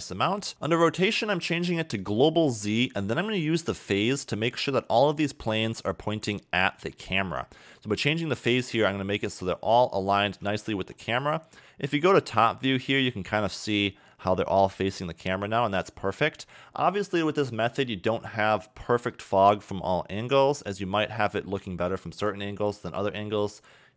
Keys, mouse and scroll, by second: 0.5 click, 1.3 click, 4.5-6.1 scroll down 2, 6.1 middle click, 7.8 click, 10.0 middle click, 10.8 KP_7, 11.5-12.1 scroll down 3, 12.1 shift+middle click, 13.7 scroll down 2, 16.0-18.1 scroll down 1, 18.1 middle click, 21.0 middle click, 23.3-23.9 scroll up 4.